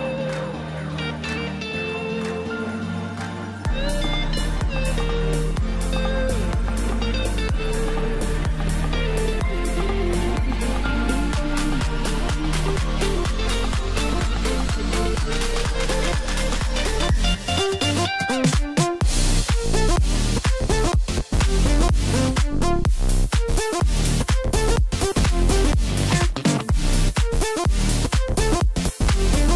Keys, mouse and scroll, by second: 1.0-1.3 scroll down 1, 1.3-4.3 middle drag, 4.9 ctrl+z, 5.4 ctrl+z, 6.0 ctrl+z, 6.4 ctrl+z, 9.0-12.0 middle drag, 12.0 ctrl+r, 16.8 click, 18.0 Tab, 19.1 ctrl+a, 21.5 click, 21.8 drag, 22.9 Tab, 23.4-24.0 scroll up 1, 24.8 click, 25.2-26.1 scroll up 1, 28.4 scroll down 1, 28.9-29.5 middle drag.